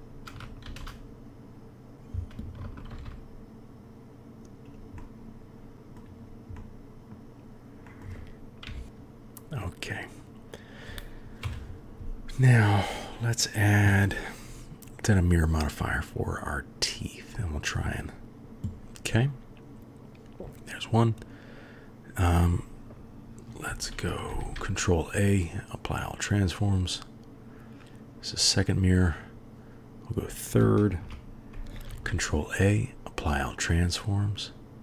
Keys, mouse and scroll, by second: 0.7 shift+d, 2.9 shift+d, 5.1-6.0 middle drag, 6.6-7.2 drag, 8.0 click, 8.7 KP_3, 11.4 KP_1, 16.1-18.2 drag, 23.7 ctrl+a, 24.4 ctrl+a, 26.5-28.0 drag, 29.1 click, 31.9 ctrl+a, 34.1-34.8 drag.